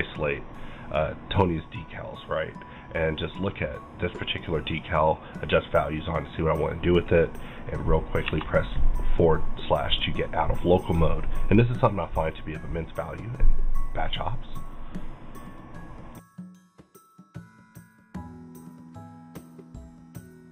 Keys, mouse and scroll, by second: 0.9 click, 1.5-8.2 drag, 3.3-5.5 middle drag, 5.5-9.2 middle drag, 9.2-13.1 middle drag.